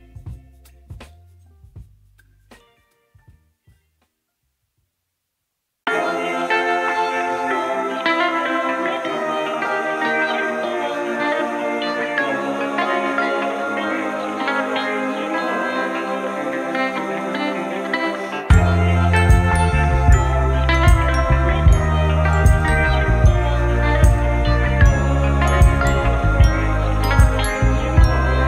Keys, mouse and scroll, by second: 0.7 click, 1.0 shift+a, 8.6 middle click, 10.2 click, 11.1 middle click, 12.2 middle click, 12.3 click, 16.8-18.8 drag, 19.1 middle click, 19.3 click, 20.4-21.6 drag, 21.9 middle click, 23.5-24.8 drag, 26.6 middle click, 28.0 click.